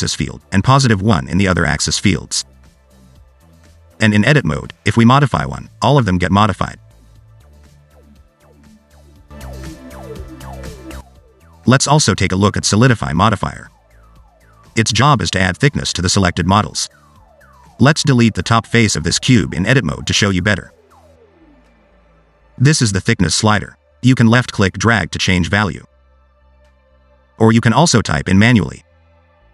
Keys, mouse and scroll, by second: 1.9 click, 3.6 Tab, 5.1 g, 7.5 Tab, 9.2 click, 11.0 click, 16.6 Tab, 17.4 3, 18.1 click, 18.8 x, 24.9 click, 26.7 middle click, 27.0-27.5 scroll up 1, 27.5 click.